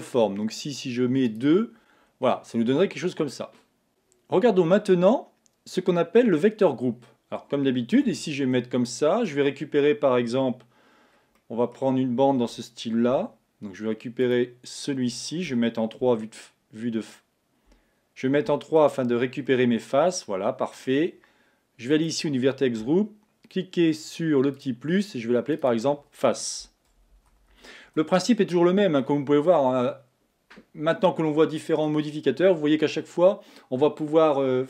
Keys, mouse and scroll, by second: 1.4 click, 2.1-2.5 scroll down 1, 2.5-4.5 middle drag, 3.2 scroll, 3.9 scroll down 2, 7.1 scroll down 2, 8.2 Tab, 8.6-11.0 middle drag, 11.0-11.5 scroll down 1, 11.5-12.5 middle drag, 12.5 a, 14.3 alt+click, 15.6 3, 18.9 alt+click, 19.5-22.0 middle drag, 22.0 click, 24.6-25.7 drag, 25.8-28.8 drag.